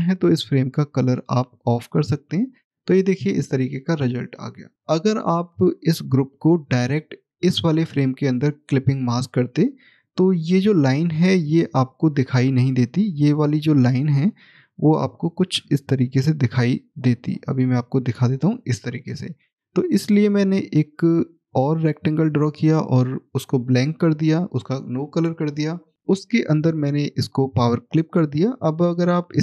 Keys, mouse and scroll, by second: 1.0 click, 4.7 middle click, 9.9 middle click, 12.6 click, 28.2 click.